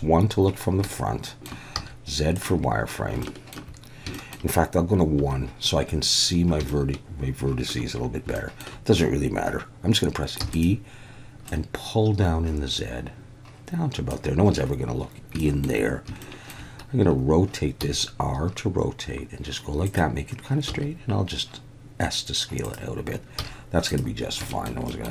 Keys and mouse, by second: 1.0-1.5 shift+middle drag, 1.7 z, 3.3 shift+middle click, 4.2 shift+middle click, 5.2 1, 6.7-7.7 shift+middle drag, 8.4 shift+middle click, 10.4 e, 10.5 click, 11.5-14.1 drag, 15.5 shift+click, 16.3 shift+click, 17.8 r, 19.9 click, 20.7 s, 22.6 click, 23.4 z, 24.5 shift+middle click, 25.0 middle click.